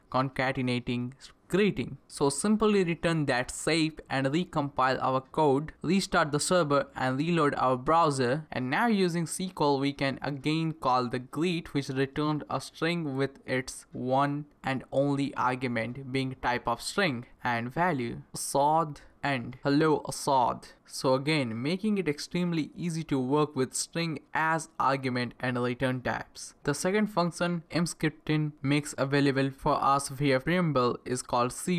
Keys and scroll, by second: 0.0-4.6 typing, 4.6 Up, 4.9 Return, 5.9 ctrl+c, 6.1 Up, 6.2 Return, 9.1-19.9 typing, 16.7 Right, 17.7 Left.